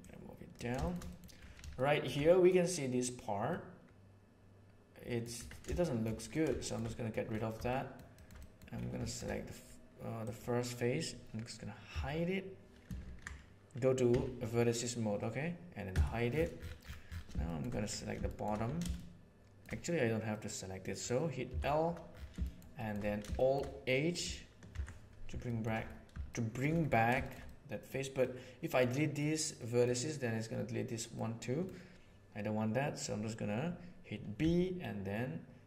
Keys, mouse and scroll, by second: 0.0 click, 1.0 middle click, 1.6-2.0 shift+middle drag, 2.2 middle click, 3.5-5.1 middle drag, 5.3 Tab, 5.7 shift+middle click, 6.6 shift+middle click, 6.8 middle click, 7.6 shift+middle click, 8.1 middle click, 8.3 middle click, 11.8 h, 12.9 ctrl+z, 14.0 1, 15.8 h, 17.4 middle click, 18.2 middle click, 18.8 shift+middle click, 20.2 middle click, 21.4 l, 22.2 shift+middle click, 22.7 shift+middle click, 23.3 shift+middle click, 24.6 alt+h, 25.4 shift+middle click, 26.2 shift+middle click, 27.1 shift+middle click, 27.4 middle click, 28.1 middle click, 29.1 middle click, 31.0 middle click, 34.3 b.